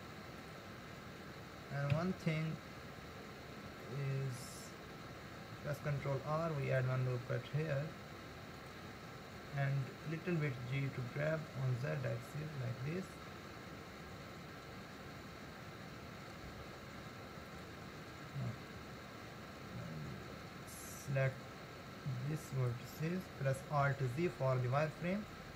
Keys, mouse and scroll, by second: 1.9 KP_1, 2.8-3.8 scroll up 2, 3.8-5.9 shift+middle drag, 5.9 ctrl+r, 9.8 g, 21.4 click, 23.9 alt+z, 24.9 click.